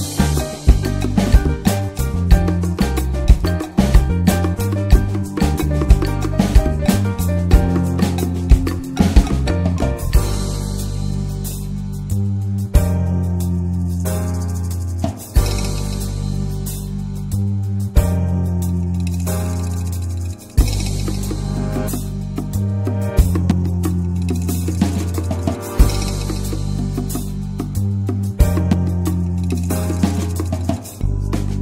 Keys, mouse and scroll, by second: 0.9 alt+z, 1.4 click, 2.0 s, 3.1 scroll up 4, 3.8 scroll down 1, 4.4 alt+z, 4.6-4.9 scroll down 1, 4.9 Tab, 5.0 click, 5.3 middle click, 5.8 right click, 6.1 drag, 6.3 scroll down 2, 6.4-6.9 middle drag, 6.9 ctrl+s, 7.0 ctrl+click, 7.2 drag, 7.4-7.7 middle drag, 7.7 ctrl+s, 7.9 Tab, 8.2 click, 8.5 l, 9.7 Tab, 9.7 click, 10.0 alt+middle click, 10.2 click, 10.4 ctrl+s, 10.7-12.4 middle drag, 12.4 ctrl+s, 12.6-13.0 shift+middle drag, 13.0 ctrl+s, 13.2 shift+a, 17.7 click, 18.6 shift+middle click, 18.9 Tab, 19.3 click, 19.8 s, 21.2 shift+middle click, 22.1 ctrl+r, 22.7 1, 22.8 click, 23.1 alt+z, 23.4 click, 24.2 ctrl+z, 24.4-24.8 scroll down 2, 24.8-26.5 drag, 26.5 Tab, 26.7 click, 27.0 ctrl+1, 27.2 ctrl+2, 27.7 ctrl+3, 28.0-28.6 right drag, 28.6 s, 29.3 alt+z, 29.6 middle click, 29.7-30.7 scroll up 6, 29.9 shift+middle click, 30.7 ctrl+s, 30.9 drag, 31.5 drag.